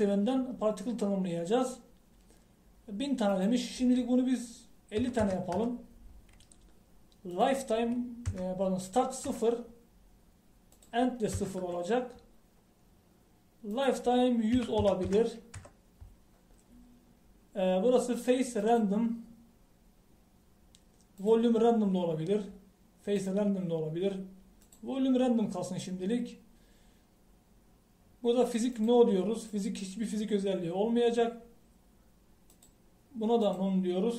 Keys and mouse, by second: 8.4-14.8 drag, 16.1 KP_0.